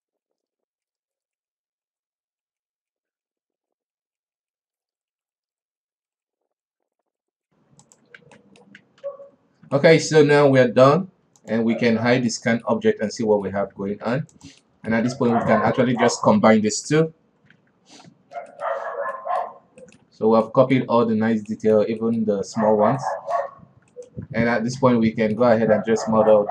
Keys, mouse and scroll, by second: 0.3 click, 0.5 shift+Tab, 0.7 right drag, 1.0 shift+z, 1.1 middle click, 1.3 shift+z, 1.4 middle drag, 1.6 click, 2.1 KP_7, 2.8 right click, 3.4 right click, 3.7 right click, 4.0 right click, 4.7 scroll down 4, 4.8 Tab, 4.9 middle click, 5.0 shift+z, 5.1 shift+middle drag, 5.2 scroll up 3, 5.4 middle click, 5.5 Tab, 5.7 shift+middle click, 5.9 right click, 6.2 right click, 6.3 middle drag, 6.5 right click, 7.0 middle click, 7.1 Tab, 7.2-8.0 middle drag, 8.0 w, 8.7 alt+a, 8.8 middle click, 9.5 ctrl+s, 10.2-11.9 shift+middle drag, 11.9 click, 12.5 scroll down 4, 12.8-13.2 middle drag, 13.2-13.6 scroll up 1, 13.6-14.1 middle drag, 14.1 a, 15.1-15.6 middle drag, 15.6 alt+a, 15.8 right drag, 16.3 shift+right click, 17.4 ctrl+j, 18.0 alt+a, 18.4 scroll down 3, 19.0 middle drag, 19.2-19.6 scroll up 3, 19.6-19.9 middle drag, 19.9 scroll up 1, 20.3 shift+middle click, 20.6 alt+w, 20.9-21.3 middle drag, 21.3 scroll up 2, 21.7 alt+w, 22.0-23.2 middle drag, 23.2 scroll down 3, 23.5-24.4 middle drag, 24.4 right click, 24.5 Tab, 25.1 alt+a, 25.2-26.5 middle drag.